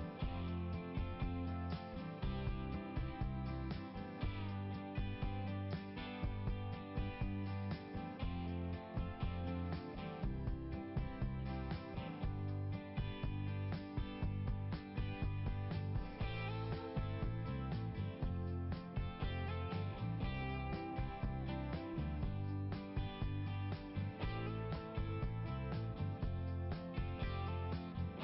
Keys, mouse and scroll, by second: 2.2 click, 3.5 click, 10.4 click, 13.1 click, 15.8 click, 16.9 click, 18.8 click, 22.0 click, 23.0 click, 25.9 click, 26.7 click.